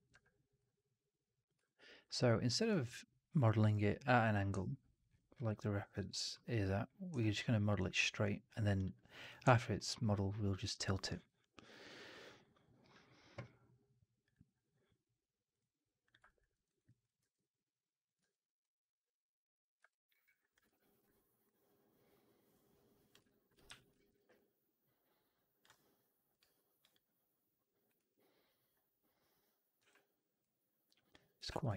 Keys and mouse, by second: 0.0 w, 0.5 click, 1.5 alt+middle drag, 1.8 alt+right drag, 2.0-2.5 alt+drag, 2.6 alt+right drag, 2.8-3.5 alt+drag, 8.7-9.3 drag, 9.4 alt+drag, 9.6 alt+middle drag, 9.9 alt+right drag, 10.1-10.6 alt+drag, 15.4 click, 16.1 alt+click, 16.4 alt+middle click, 16.6 alt+right click, 16.7 alt+click, 17.1 r, 18.1 w, 19.8 alt+click, 20.0 alt+middle click, 20.2 alt+right drag, 20.4 alt+click, 20.5 3, 23.1 alt+click, 23.5 4, 24.0 alt+middle drag, 24.2-25.5 alt+drag, 29.7 w, 31.3 r.